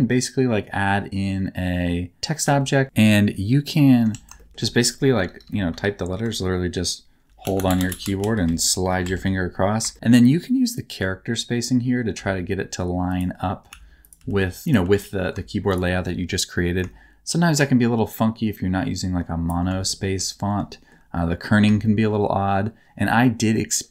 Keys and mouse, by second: 2.4 g, 2.8 s, 4.0 Tab, 4.3 shift+middle click, 5.1-8.3 typing, 9.0 Tab, 9.9 shift+middle click, 10.8 shift+middle click, 12.1 s, 13.0 click, 13.7 s, 14.0 click, 14.1 g, 14.6 click, 14.6 s, 14.8 g, 15.6 shift+middle click, 16.7-19.4 shift+middle drag, 19.9 shift+middle click, 20.8 shift+middle click, 21.9 shift+middle click.